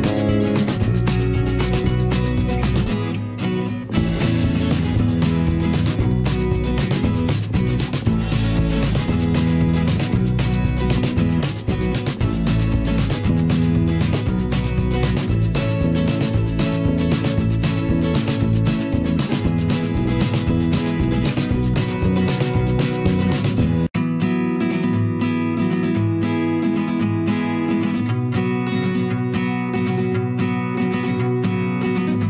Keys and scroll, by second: 0.2 ctrl+z, 0.8 p, 1.7 v, 6.2 v, 6.7 i, 7.5 v, 7.7 ctrl+shift+[, 10.4 v, 15.6 v, 16.7 i, 17.8 v, 19.5 i, 19.7 v, 20.4 i, 22.1 ctrl+z, 22.1 v, 25.7 ctrl+z, 28.2 ctrl+z, 30.8 v, 31.9 ctrl+a.